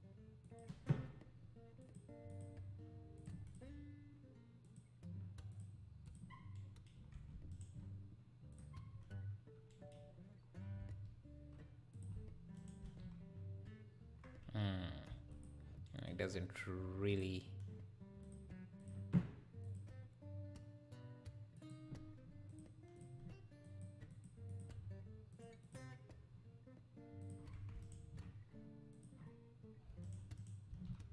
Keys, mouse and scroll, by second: 7.0-7.5 scroll up 1, 7.5-8.5 shift+right drag, 8.5-9.7 drag, 10.3-10.8 scroll up 4, 10.8 s, 12.6 shift+right click, 12.8 shift+s, 15.1 x, 17.1 click, 18.2 click, 21.7-27.8 drag, 27.8-28.9 shift+right drag, 28.9-30.0 drag, 30.0 shift+right click, 30.4 shift+right click, 30.7 shift+s.